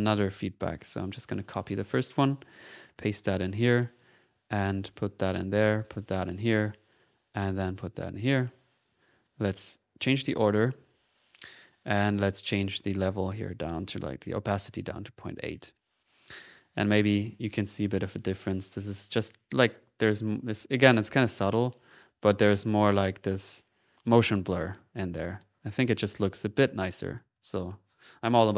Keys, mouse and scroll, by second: 0.8 ctrl+c, 1.1 ctrl+middle click, 1.4-2.7 ctrl+drag, 2.9 ctrl+v, 3.5 ctrl+click, 3.9 ctrl+v, 4.1 ctrl+click, 4.1-5.2 ctrl+middle drag, 5.4 click, 6.0 click, 8.0 click, 9.5 click, 11.3 click, 11.7 right click, 11.7 middle click, 11.9 right click, 12.1 middle click, 12.1 right click, 12.2 middle click, 13.2 click, 15.3 click, 17.1 click, 18.6 ctrl+z, 19.7 ctrl+z, 20.1 typing, 21.7 ctrl+z, 21.8 ctrl+y, 22.9 z, 23.9 ctrl+y, 24.4 ctrl+z, 24.9 ctrl+y, 25.1-26.0 typing, 26.3 click, 27.0 middle click, 27.3 click.